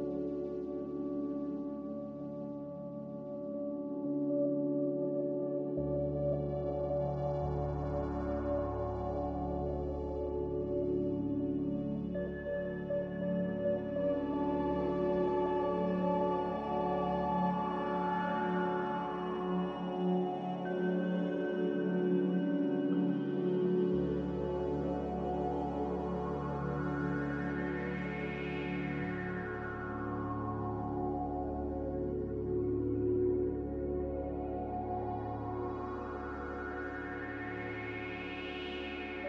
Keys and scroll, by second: 3.0 Escape, 3.0 c, 4.5 c, 10.7 z, 16.4 a, 19.7 Escape, 24.2 ctrl+z.